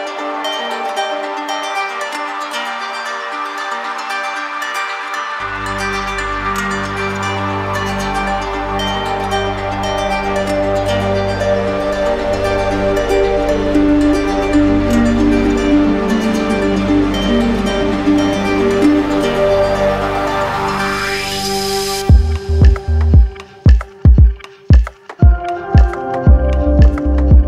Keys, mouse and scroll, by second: 0.9 click, 2.5 alt+click, 3.2 shift+click, 4.5 shift+click, 4.8 ctrl+click, 5.9 ctrl+click, 7.9 ctrl+click, 8.2 ctrl+click, 9.2 ctrl+click, 9.8 ctrl+click, 10.6 ctrl+click, 11.5 click, 12.5 ctrl+click, 13.7 q, 15.5 click, 15.9 shift+click, 16.4 ctrl+click, 17.0 w, 18.3 ctrl+click, 19.6 ctrl+click, 20.3 ctrl+click, 22.5 ctrl+click, 25.5 ctrl+click, 26.6 ctrl+click.